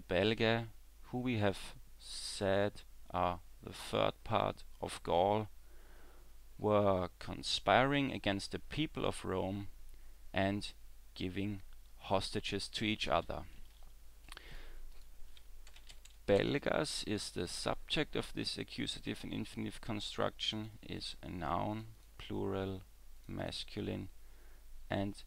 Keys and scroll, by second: 13.2 w.